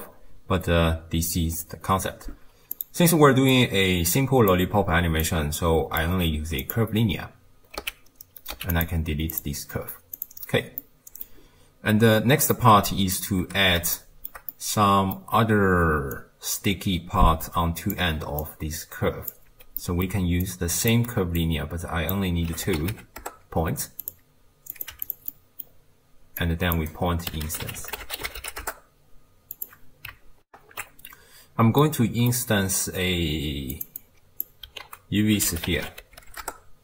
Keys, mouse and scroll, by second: 2.8 click, 3.5 click, 5.2 click, 6.6 click, 7.8 x, 8.6 x, 9.3 click, 10.2 click, 10.8-12.1 middle drag, 12.1-12.6 scroll up 1, 12.6-13.4 middle drag, 13.4 t, 14.0-15.4 shift+middle drag, 15.4-16.1 d, 16.1-18.0 drag, 18.0-18.4 d, 18.4 click, 19.4 d, 19.7 d, 19.8-20.4 middle drag, 20.4 click, 21.4 click, 24.7 click, 25.3-26.4 middle drag, 26.4 click, 30.5 ctrl+alt+shift+q, 31.8-33.7 middle drag, 33.7 click, 34.0 click, 34.8 ctrl+a.